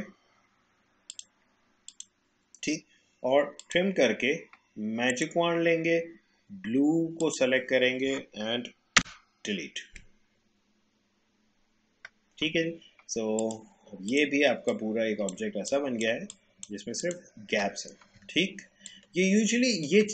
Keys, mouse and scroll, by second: 1.1 click, 9.0 Delete, 13.4 click, 15.4 space, 15.7 click, 15.9 space, 16.3 click.